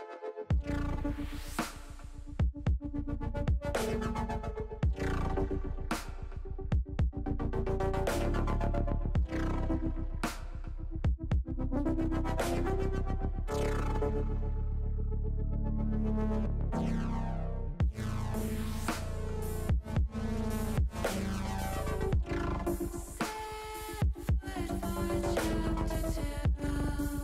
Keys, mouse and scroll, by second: 1.3-2.5 drag, 3.5 click, 4.8-6.8 drag, 8.4-9.8 drag, 15.3 click, 16.4-17.6 drag, 18.7-20.4 drag, 24.8 click, 25.9 ctrl+z, 26.9 click.